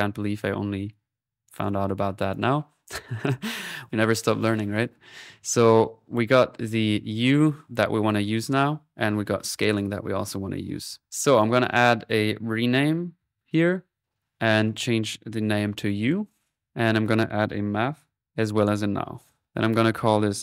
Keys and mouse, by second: 1.4 typing, 1.6 click, 9.5 typing, 11.1 middle click, 11.4 click, 12.1 middle click, 12.7-13.4 typing, 14.2 click, 14.6-16.0 drag, 17.0 right click, 17.3-18.2 typing, 18.2 click, 19.3 alt+n, 19.5 alt+click.